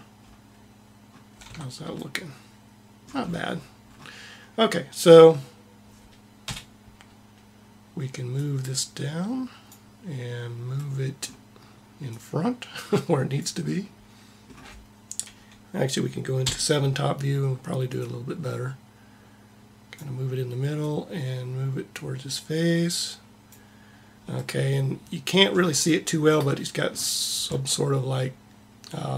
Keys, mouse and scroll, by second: 0.0-1.9 middle drag, 1.3 Tab, 2.3 middle click, 2.6 middle click, 3.1 middle click, 6.3 KP_1, 10.7 middle click, 11.9 click, 16.3 KP_7, 17.8-19.8 drag, 20.5-22.4 drag, 24.2 middle click, 25.0 middle click.